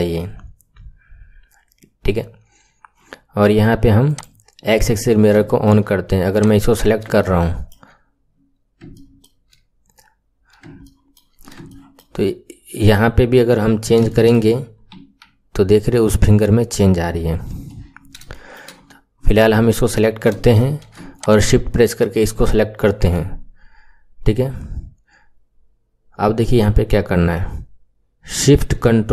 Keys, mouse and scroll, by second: 0.8-3.8 scroll down 2, 4.1 click, 4.8-5.4 scroll down 3, 5.4-6.3 shift+middle drag, 6.3 click, 6.6 scroll down 1, 7.1-8.2 shift+middle drag, 8.2-8.8 scroll up 7, 8.8-10.1 shift+middle drag, 10.1-10.8 scroll down 1, 10.8 shift+middle click, 11.3-11.6 scroll down 1, 11.6-13.7 shift+middle drag, 13.7-14.0 scroll down 1, 14.0-15.0 shift+middle drag, 15.0 r, 17.9-18.3 scroll up 6, 18.3-18.7 right drag, 18.3 shift+middle click, 19.1-19.4 scroll up 5, 19.4-21.1 right drag, 19.4 shift+middle click, 20.3 shift+middle click, 21.1 shift+click.